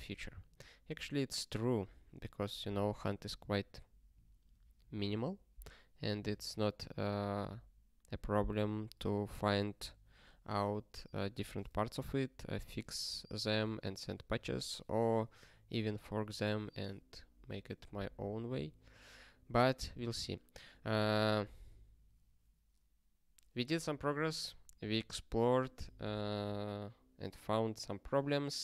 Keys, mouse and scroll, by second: 0.6 ctrl+space, 0.8 ctrl+p, 0.9 ctrl+p, 2.0 ctrl+g, 19.9 ctrl+space, 20.0 ctrl+n, 20.6 ctrl+g, 21.0 ctrl+s.